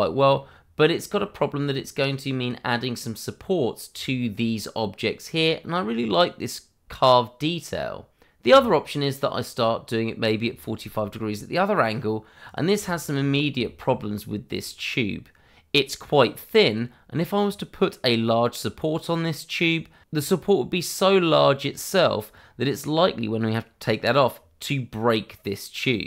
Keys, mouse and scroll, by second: 2.9 shift+middle click, 6.0 click, 6.3-7.2 scroll down 1, 7.2 click, 7.5 scroll down 1, 7.8 shift+middle click, 8.4 r, 11.8 click, 12.8 shift+middle click, 13.1 scroll up 1, 13.6 shift+middle click, 13.9 scroll up 1, 14.5 click, 16.6-17.4 scroll down 1, 17.4-18.4 scroll up 1.